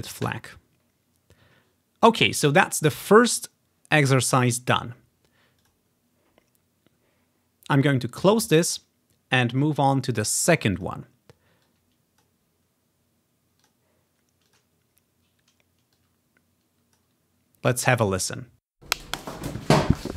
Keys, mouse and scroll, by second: 0.3 click, 5.7 click, 8.6 click, 8.8-10.4 drag, 10.8 click, 11.0 click, 11.2-13.9 drag, 14.6 click, 16.0-17.1 drag, 17.7 click, 18.9 space, 19.7-20.1 scroll up 1.